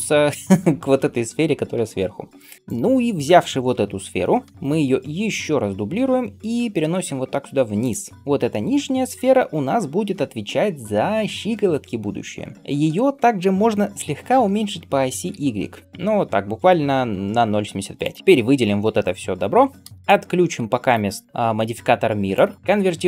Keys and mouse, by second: 4.5 shift+d, 15.2 s, 20.0 middle click, 21.2 middle click, 22.6-23.0 middle drag.